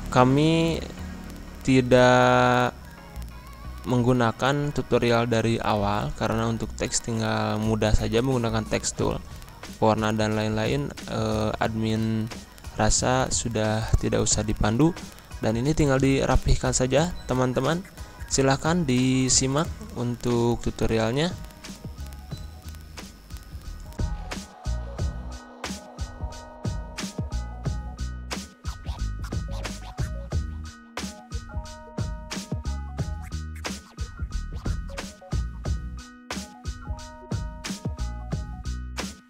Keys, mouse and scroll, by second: 0.5 click, 2.0 ctrl+Page_Down, 4.8 ctrl+Page_Up, 6.6-13.3 drag, 13.3 ctrl+Page_Down, 14.7 ctrl+Page_Down, 15.9 ctrl+Page_Up, 19.6 click, 21.2 ctrl+Page_Up, 24.0-28.2 drag, 28.2 scroll up 1, 29.3 ctrl+Page_Up, 31.5 click, 35.9 ctrl+Page_Down, 38.9 click.